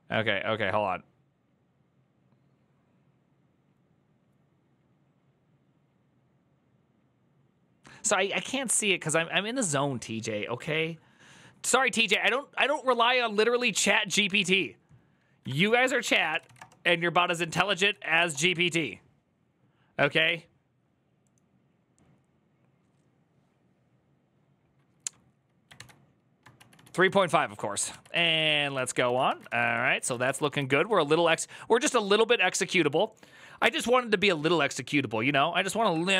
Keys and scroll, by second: 16.2-18.2 typing, 16.3 Return, 25.5 alt+h, 26.6-30.9 typing, 27.8 alt+{, 29.3 ctrl+c.